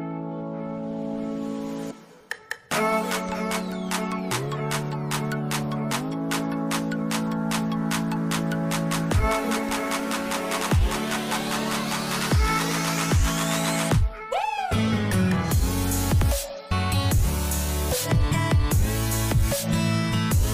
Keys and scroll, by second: 0.7 ctrl+0, 12.8 ctrl+c, 12.9 ctrl+v, 16.4 Right, 16.5 Up, 16.6 Right, 16.7 Up, 16.8 Right, 17.1 Up, 17.2 Right, 17.3 Up, 17.4 Right, 17.4 Up, 17.5 Right, 17.6 Up, 17.7 Right, 17.8 Down, 18.1 Up, 18.2 Right.